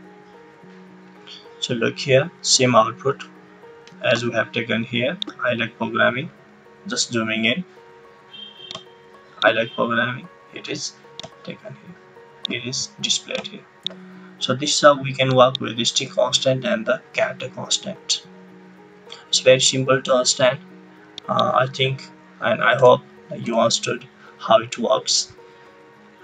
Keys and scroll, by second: 22.7 BackSpace, 23.4 BackSpace.